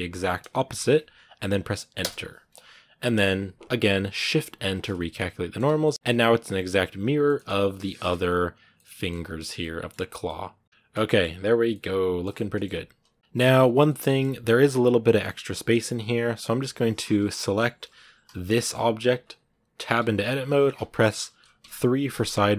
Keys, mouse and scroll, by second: 2.3-4.5 middle drag, 4.5 shift+n, 4.9 middle click, 5.3 scroll down 1, 5.4 Tab, 5.6-7.4 middle drag, 7.4 right click, 7.7 r, 8.6 middle click, 9.0 scroll down 2, 9.2 a, 9.4 middle click, 9.9 scroll down 1, 10.0-11.1 middle drag, 11.1 scroll up 1, 11.5-13.4 middle drag, 13.4 scroll up 2, 13.7 middle click, 14.1 scroll up 2, 15.8-17.1 right drag, 17.1 KP_1, 18.2 scroll down 3, 18.4 shift+middle click, 19.0 scroll up 2, 19.8 Tab, 20.9 KP_1, 22.2-22.5 scroll up 1.